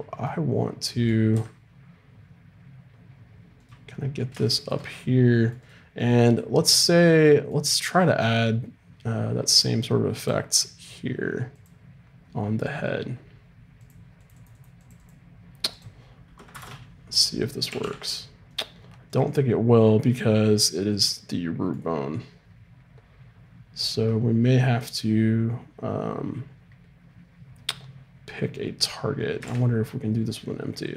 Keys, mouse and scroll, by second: 0.2-1.3 middle drag, 1.3 r, 5.6-7.4 right drag, 9.5-13.3 drag, 13.8-17.7 drag, 17.7 g, 19.1-20.8 drag, 21.3-23.5 middle drag, 26.8 middle click, 29.4 shift+a.